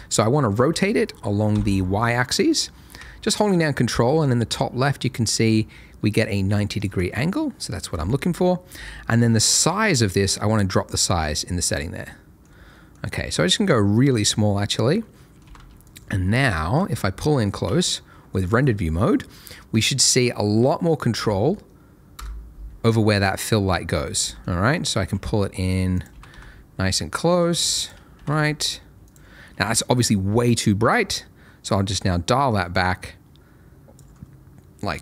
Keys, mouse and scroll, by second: 0.6 x, 1.5 y, 7.0 ctrl+click, 7.1 ctrl+middle click, 9.6 click, 12.0 middle click, 12.4-12.7 scroll up 1, 12.7 middle click, 13.0-14.1 scroll up 1, 14.1 click, 15.0 middle click, 15.4 g, 15.5 z, 15.8 click, 16.2 scroll up 1, 16.5 shift+middle click, 16.9 shift+scroll up 1, 17.0 middle click, 17.6 z, 20.2 shift+middle click, 21.0-21.5 scroll down 1, 22.1 KP_0, 22.8-23.6 scroll down 1, 23.7 shift+middle click, 24.2 g, 24.3 middle click, 25.0 x, 25.9 click, 26.1 g, 26.3 y, 27.8 click, 28.1 r, 28.3 z, 29.0 click, 34.2-35.0 scroll up 1.